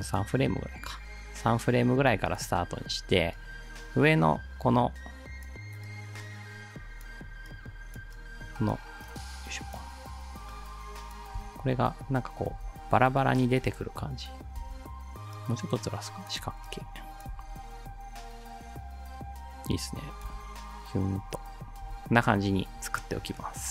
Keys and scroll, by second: 11.4 space, 12.6 space, 13.7 space, 18.2 space, 20.3 space, 21.8 space.